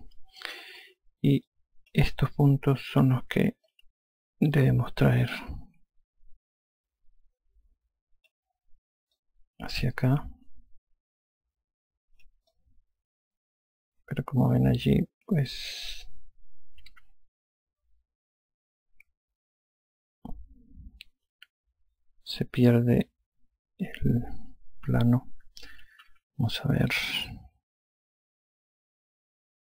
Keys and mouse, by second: 0.9 F1, 2.3 click, 4.5 alt+click, 10.0 click, 13.4 alt+click, 26.9 F2.